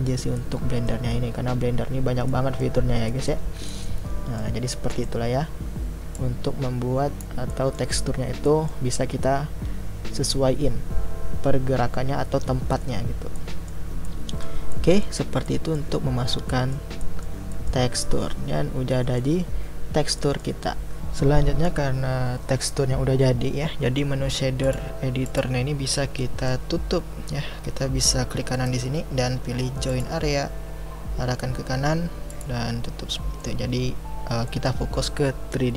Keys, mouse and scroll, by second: 7.5-30.0 middle drag, 30.0-31.5 right drag, 33.1-33.7 middle drag, 33.7-34.5 scroll down 1, 34.5-35.7 middle drag.